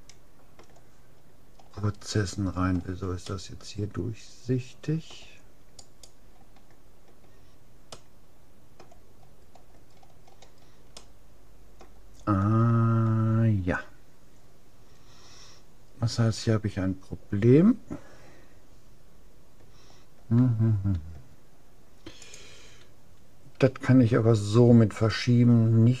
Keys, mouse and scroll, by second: 1.2-5.0 middle drag, 5.8-7.6 right drag, 8.0-11.0 middle drag, 12.6-14.4 middle drag, 16.2-18.6 middle drag.